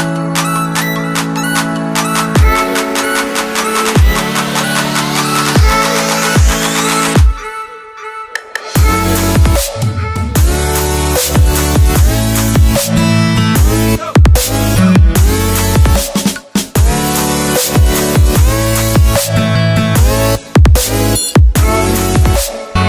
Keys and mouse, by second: 0.2-0.8 shift+middle drag, 0.8 shift+click, 1.7-2.1 shift+drag, 3.0 shift+middle click, 5.5 click, 6.5 drag, 7.0 click, 9.2 shift+d, 11.7 click, 16.4-16.8 drag, 21.8-22.7 drag.